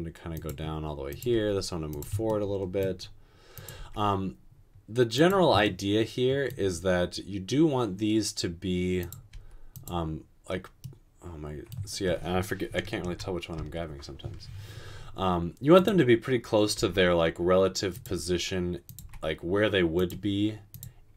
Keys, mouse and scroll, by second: 1.3 typing, 3.8 typing, 9.5 typing, 12.9-13.6 typing, 16.8 typing, 19.0 typing.